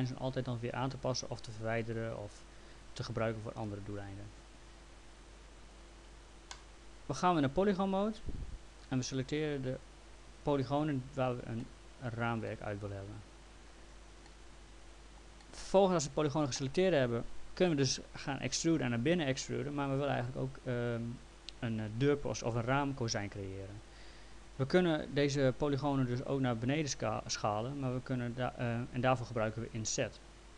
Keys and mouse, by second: 6.5 click, 8.5 click, 9.9 ctrl+click, 11.6 alt+middle click, 14.3 middle click, 15.4 alt+middle click.